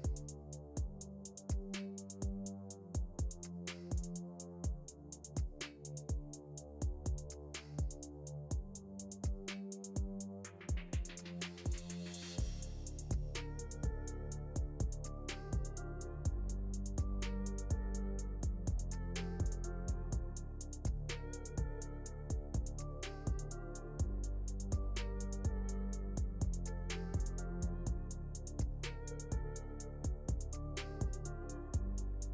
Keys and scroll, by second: 25.4 Delete.